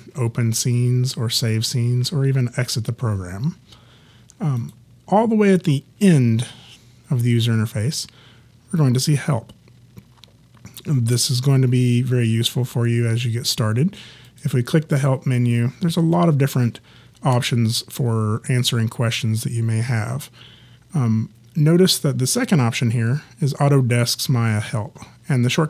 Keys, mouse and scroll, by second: 4.6 click, 14.3 click.